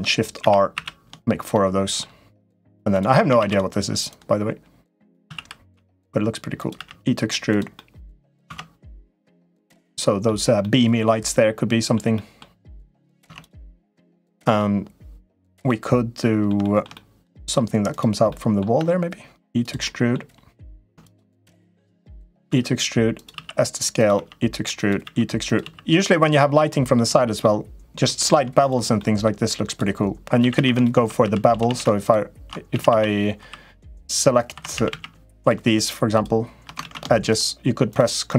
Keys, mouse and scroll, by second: 0.2 shift+r, 0.5 shift+r, 1.3 middle click, 2.1 click, 2.7 click, 3.2 shift+d, 4.0 click, 5.0 s, 6.5 e, 7.6 middle click, 8.2 Tab, 9.0-10.0 middle drag, 10.4-11.7 middle drag, 11.9 middle click, 13.0 Tab, 13.8 middle click, 15.4 middle click, 16.4 shift+middle click, 16.7 middle click, 17.6 click, 18.0 middle click, 18.5 e, 19.7 middle click, 20.8 click, 22.2-25.4 typing, 26.4 middle click, 26.8 Tab, 27.1 middle click, 28.1 Tab, 28.4 click, 28.7 middle click, 29.4 click, 30.2-31.4 typing, 32.5 a, 32.6 a, 33.2 3, 33.7 click, 34.4 2, 34.5 a, 34.6 a, 35.2 shift+click, 35.5 shift+click, 35.9 shift+click, 36.6 ctrl+z, 37.1 shift+click, 37.7 click, 38.0 click.